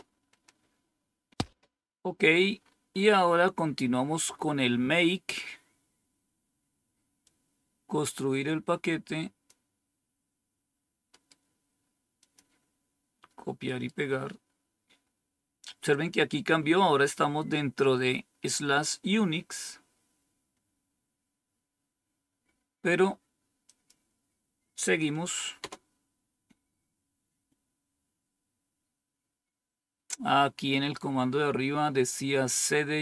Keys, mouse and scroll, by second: 2.6-3.9 scroll up 2, 4.6-5.5 scroll down 2, 5.5-7.2 scroll down 1, 7.2-9.4 drag, 12.1 click, 23.6 click, 24.2 click, 25.5 Return, 30.9-31.6 scroll up 1.